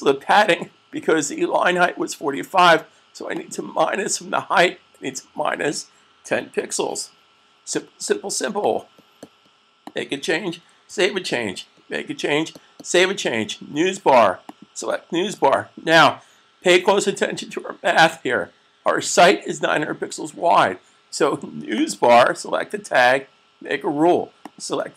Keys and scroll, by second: 6.1-6.7 typing, 10.7 super+s.